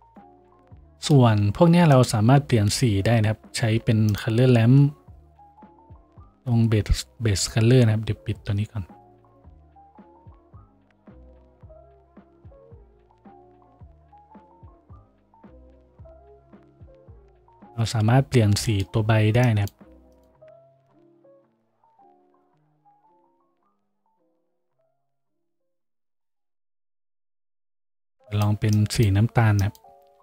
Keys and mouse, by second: 3.4 shift+a, 14.8 shift+click, 15.6-23.2 shift+middle drag, 15.9 shift+d, 19.8-21.0 drag, 23.1-24.4 drag, 24.4-26.4 middle drag, 26.4-30.2 drag.